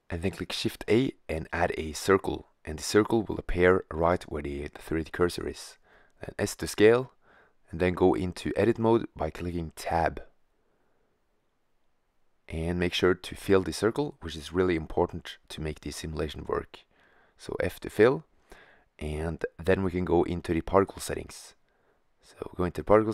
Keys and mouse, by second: 1.4-2.3 middle drag, 3.7 s, 9.2-11.0 drag, 11.3 Tab, 12.9 f, 14.9 Tab, 16.1 middle click, 16.2 middle click, 19.1-22.5 middle drag.